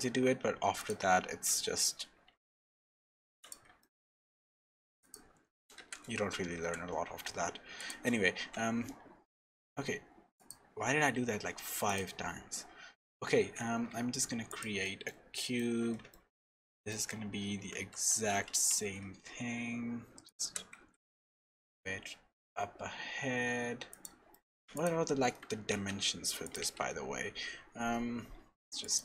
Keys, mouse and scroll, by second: 0.0 Tab, 0.0 ctrl+r, 0.0 click, 0.0 scroll down 4, 1.7 Tab, 2.0-2.7 scroll up 4, 2.3 Tab, 3.2 1, 3.4 click, 3.8 shift+middle click, 4.2 shift+s, 5.9 shift+s, 8.3 Tab, 8.8-9.2 scroll down 4, 9.5 middle click, 9.5 scroll down 4, 10.4 click, 10.8-11.3 scroll up 3, 11.1 Tab, 11.8 click, 12.2-12.8 scroll up 2, 13.3 shift+a, 14.8 middle click, 15.8 middle click, 15.8-16.1 scroll up 2, 16.1 shift+middle click, 17.6 s, 20.4 g, 24.3 middle click, 24.7 click, 25.1-25.5 scroll down 2, 25.7 ctrl+a, 26.8 n, 28.8 click.